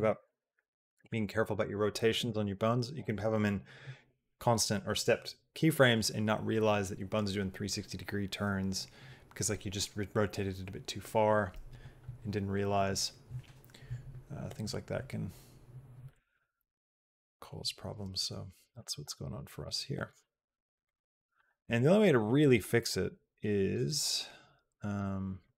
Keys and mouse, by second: 18.6-19.9 drag, 20.6 click, 22.3-23.6 drag, 24.8 click.